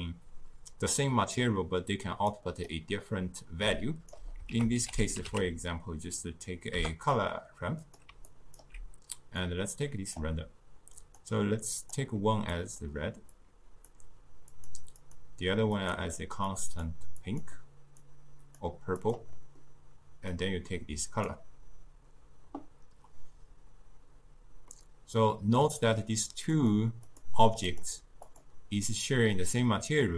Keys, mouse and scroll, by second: 2.3-3.7 drag, 3.7 d, 3.8-4.5 right drag, 4.5 ctrl+a, 8.3-9.5 alt+right drag, 9.5-11.9 drag, 15.0-17.4 drag, 19.4-20.4 middle drag, 20.4-23.4 drag, 24.8-26.6 middle drag, 26.6 click, 27.1 click, 27.8 click, 29.1 click.